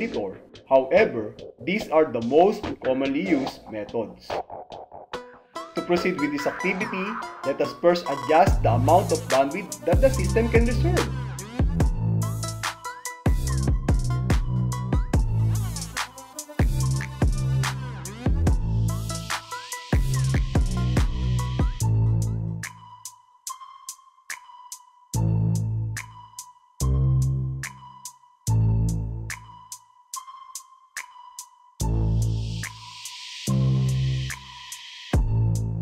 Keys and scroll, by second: 12.3 a, 14.3 Right, 16.3 n, 18.3 Right, 20.2 q, 22.2 super+Up, 24.2 Tab, 26.2 l, 27.3 l, 28.8 l, 30.8 Return, 32.8 alt+e, 34.8 Tab.